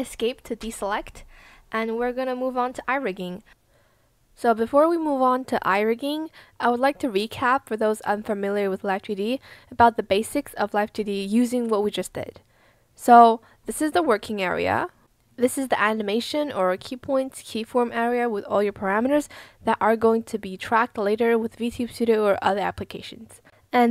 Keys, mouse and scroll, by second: 0.6 Escape.